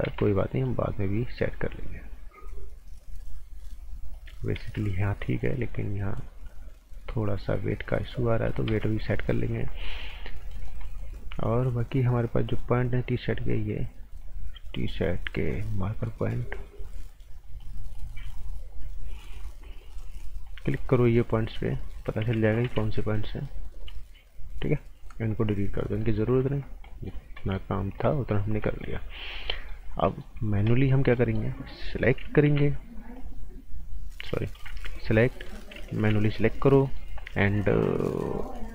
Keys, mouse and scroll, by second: 0.1 ctrl+z, 0.4 right click, 1.2 click, 4.6 ctrl+z, 5.4 click, 8.7 ctrl+z, 9.0 right click, 9.9-10.2 scroll down 1, 10.2 right click, 12.2 click, 20.2 scroll up 1, 21.5 alt+right click, 23.0 click, 25.8-26.4 scroll down 2, 26.0 right click, 26.8 right click, 27.2 scroll up 1, 27.4 right click, 27.8 scroll up 1, 28.0 right click, 28.4 scroll down 1, 28.6 right click, 29.9 scroll up 1, 30.0 right click, 30.4 scroll up 1, 30.6 right click, 31.0 scroll down 1, 31.1 right click, 32.4 g, 32.8 scroll up 1, 33.1 click, 34.5 b, 34.9 click, 35.3 right click, 36.0 g, 36.3 click, 36.8 right click.